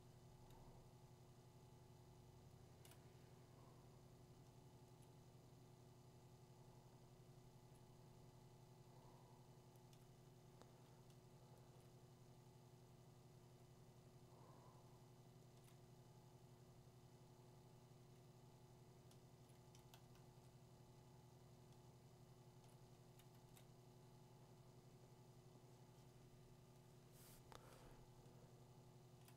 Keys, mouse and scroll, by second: 0.4 [, 1.5 click, 1.9 click, 2.7 click, 6.7 click, 7.7 click, 9.9 click, 11.7 click, 15.7 click, 19.5 click, 20.1 click, 20.2 click, 21.7 click, 22.7 click, 23.3 click.